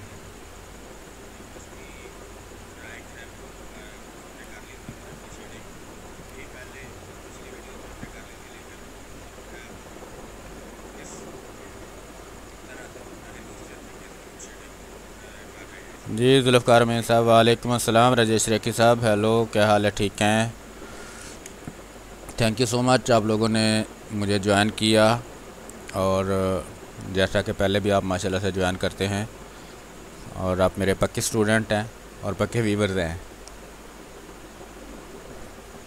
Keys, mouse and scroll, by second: 0.1 space, 0.8-5.2 drag, 5.2 space, 5.6 click, 6.2 space, 6.4 click, 6.7 r, 6.8 click, 7.5 b, 8.8-10.3 drag, 10.3 space, 10.6 alt+click, 12.3-16.8 ctrl+drag, 21.2 b, 21.5 click, 21.9 space, 22.8-35.3 drag, 35.3-35.8 typing, 35.7 click.